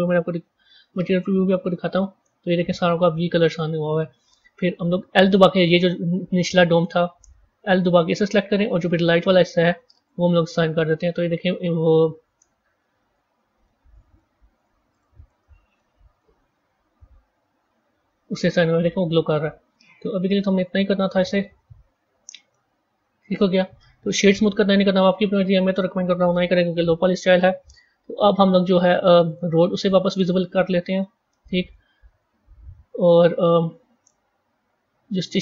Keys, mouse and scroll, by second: 0.4 z, 2.8 a, 6.3-7.9 middle drag, 7.9 l, 9.0 click, 9.9-12.7 drag, 12.7 z, 13.5 middle click, 14.2 z, 15.2 Tab, 15.7-16.3 middle drag, 16.3 z, 17.4 z, 18.3-20.5 middle drag, 20.5 z, 22.4-26.6 middle drag, 26.6 KP_1, 29.2 click, 29.9-30.9 scroll down 6, 30.9-31.9 middle drag, 31.9-32.4 scroll down 8, 35.2 click.